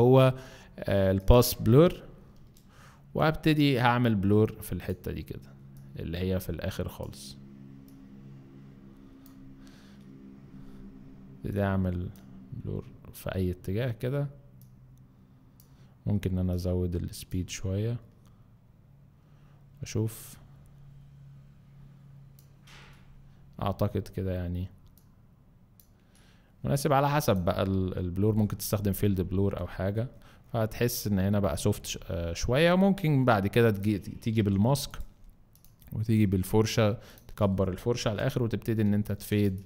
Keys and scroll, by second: 34.3 b, 38.0 ].